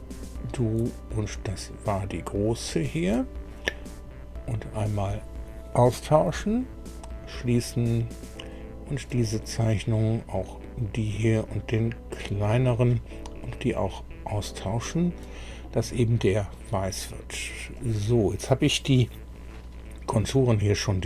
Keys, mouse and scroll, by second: 2.5 ctrl+click, 4.8 click, 6.9 click, 8.3 click, 9.6-10.0 scroll up 2, 10.9 click, 12.1 click, 13.9 click, 14.9 click, 17.7 click.